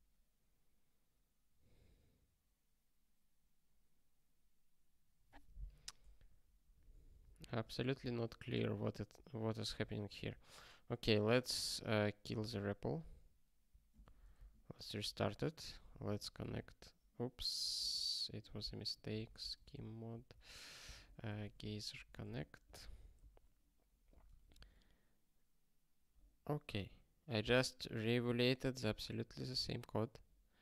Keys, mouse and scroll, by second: 6.7 super+o, 14.9 super+o, 15.9 alt+x, 16.4 Return, 17.8 alt+x, 20.3 Return, 21.0 alt+x, 22.2 Return, 22.8 Return, 24.1 super+o, 24.9 ctrl+k, 28.3 scroll down 1.